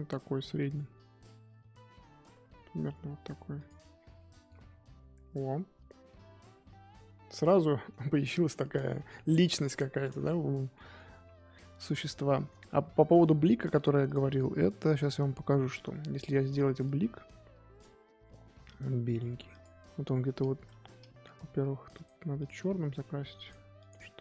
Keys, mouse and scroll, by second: 1.0-3.5 scroll down 2, 3.5 click, 3.9 scroll down 3, 4.1 middle click, 4.6-6.0 scroll down 5, 6.1-9.6 middle drag, 9.6-10.7 scroll up 4, 10.7 middle click, 11.1 KP_1, 11.5-12.2 scroll up 8, 12.2 shift+middle click, 12.4-12.9 scroll down 1, 16.5-20.1 drag, 20.1-20.7 scroll up 1, 20.7-22.0 scroll up 1, 22.0 click, 22.4 click, 22.9 f, 23.7 click.